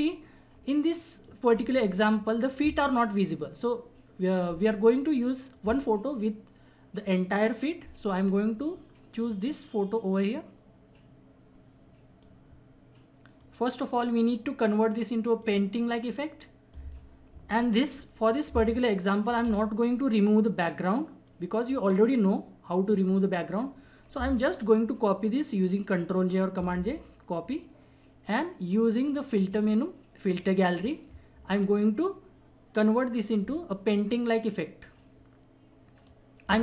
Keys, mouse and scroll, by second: 0.9 click, 1.8 ctrl+-, 5.3 click, 9.1-17.5 drag, 17.5 ctrl+=, 18.5 space, 18.8 click, 19.0 space, 21.2-26.5 drag, 24.7 ctrl+Num_Lock, 26.5 ctrl+j, 29.1 click, 36.2-36.6 drag.